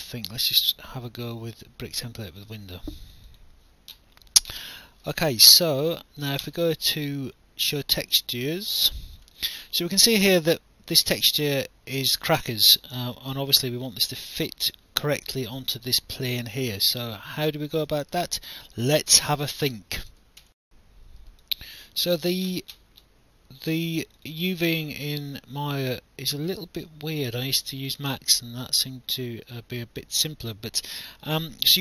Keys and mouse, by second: 2.3 click, 5.8 alt+click, 8.6 click, 9.4 alt+click, 10.5 alt+click, 13.1 alt+click, 15.4 alt+click, 18.3 alt+click, 20.4 alt+F9, 21.4 alt+click, 24.2 click.